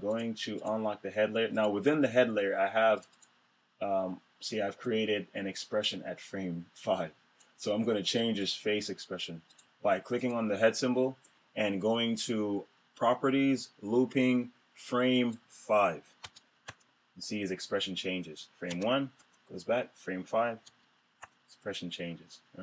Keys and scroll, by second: 16.2 Return, 18.7 Return.